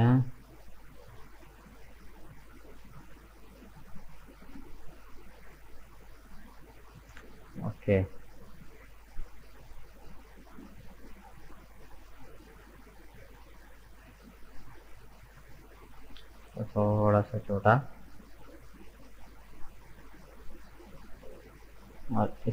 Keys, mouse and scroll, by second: 0.8 right click, 1.5 shift+right click, 2.0 shift+right click, 2.3-3.7 middle drag, 3.7 shift+right click, 4.2 shift+right click, 4.7 shift+right click, 5.0-8.1 middle drag, 9.0 right click, 9.6-12.9 middle drag, 12.9 alt+right click, 13.3-17.0 middle drag, 17.0 s, 20.7 alt+shift+right click, 21.7 right click.